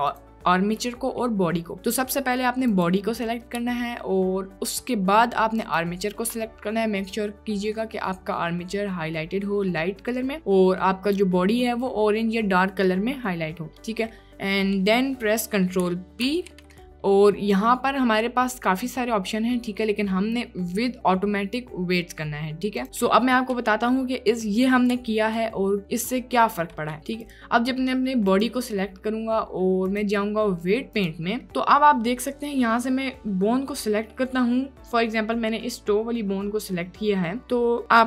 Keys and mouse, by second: 0.2 click, 1.7 click, 2.6 click, 5.7 shift+click, 13.7 click, 14.1-14.5 drag, 14.8 click, 15.3 click, 16.2 ctrl+p, 22.8 click, 27.2 click, 28.4 click, 30.0-31.2 drag, 34.1 drag.